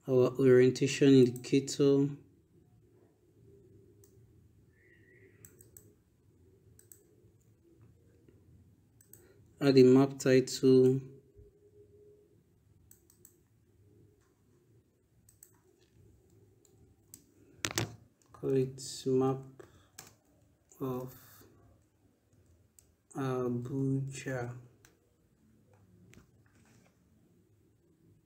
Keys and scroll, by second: 16.5 ctrl+BackSpace, 18.3 Caps_Lock, 18.9-20.8 typing, 22.1 a, 23.9 j, 24.1 a.